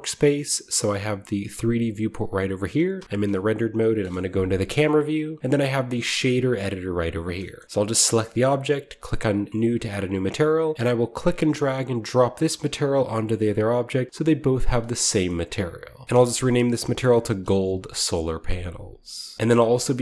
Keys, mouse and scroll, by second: 0.2 click, 1.4 click, 2.9 z, 3.9 KP_0, 5.4 click, 7.3-9.5 shift+middle drag, 7.6 shift+click, 7.8-9.5 shift+right drag, 9.5-14.1 drag, 10.7 ctrl+z, 10.8 middle click, 14.1-14.4 middle drag, 14.4 right click, 14.6-16.0 middle drag, 16.0-17.5 typing, 19.3 click, 19.3 Return, 19.8-20.0 middle drag.